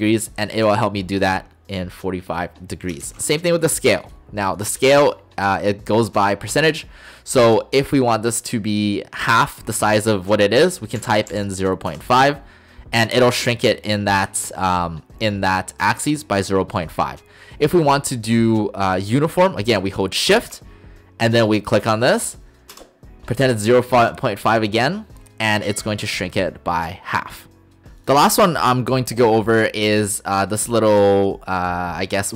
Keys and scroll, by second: 3.1 ctrl+z, 11.0-11.3 typing, 11.9 Return, 22.8 shift+Return.